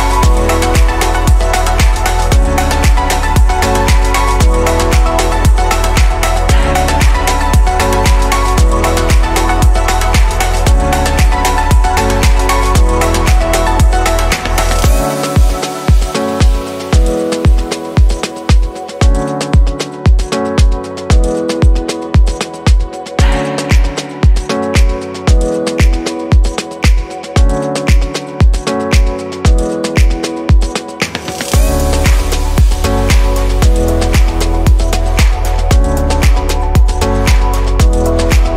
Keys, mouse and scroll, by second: 0.5 Delete, 2.6 click, 9.1 click, 11.6 l, 18.3-19.0 drag, 20.0 Delete, 22.1 shift+click, 23.3 click, 23.8 click, 24.4 shift+click, 25.8 ctrl+j, 28.1-30.0 right drag, 30.0 click, 32.2 click, 32.6-33.5 scroll down 3, 33.5-38.5 middle drag.